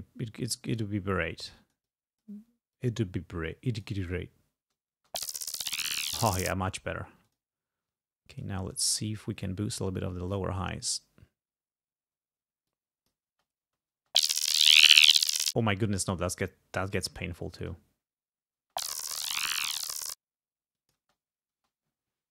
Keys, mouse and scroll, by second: 0.8 click, 1.7 click, 2.8-4.1 drag, 4.1 space, 5.0 space, 6.4 space, 7.3 click, 8.4 click, 9.5-10.5 drag, 10.7-11.9 scroll up 3, 12.2-12.6 scroll up 2, 12.7 click, 13.4 space, 15.4 space, 15.7-17.3 drag, 17.4 space, 18.7 space, 19.7 click, 20.2-20.6 scroll down 2, 20.9 click, 21.1 space.